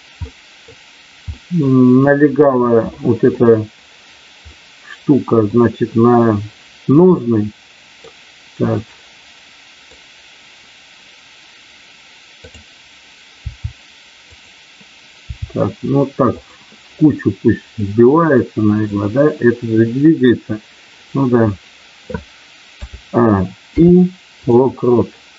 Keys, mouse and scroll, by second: 0.3 middle click, 1.3 middle click, 2.9 middle click, 4.4 middle click, 7.2 middle click, 8.7-10.0 middle drag, 12.4 click, 13.4 r, 14.3 click, 15.2 r, 17.8-18.9 middle drag, 23.7 i.